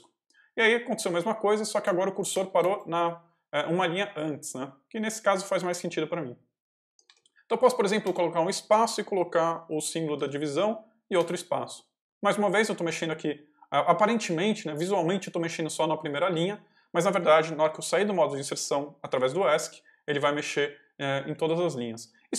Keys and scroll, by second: 2.2 space, 6.8 BackSpace, 7.9 space, 8.9 shift+space, 9.9 shift+\, 11.2 space, 19.0 Escape, 21.2 j.